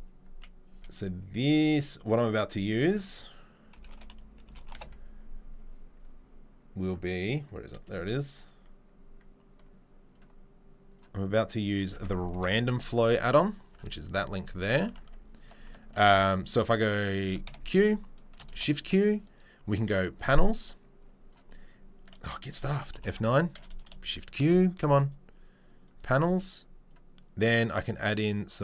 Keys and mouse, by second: 14.4-14.8 right drag, 14.8 Tab, 15.3 Tab, 15.6 Tab, 16.0 Tab, 17.4 q, 18.5 shift+q, 22.9 F9, 24.4 shift+q.